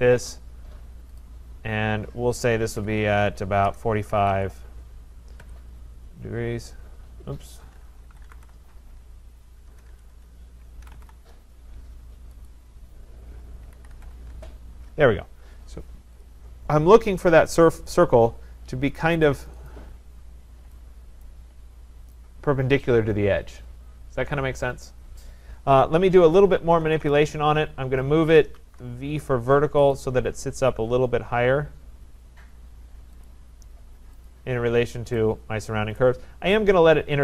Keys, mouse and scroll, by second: 1.2 click, 2.6-4.7 typing, 3.8-6.2 drag, 5.4 Return, 7.5-11.5 typing, 12.5 click, 13.4-14.4 typing, 16.3 click, 17.3 Return, 17.4 click, 19.5 click, 19.7 click, 20.4-20.9 scroll, 21.2 right click, 21.7-22.2 scroll, 26.3-29.1 typing, 30.0 click, 33.2 click, 34.3 click, 36.0 right click.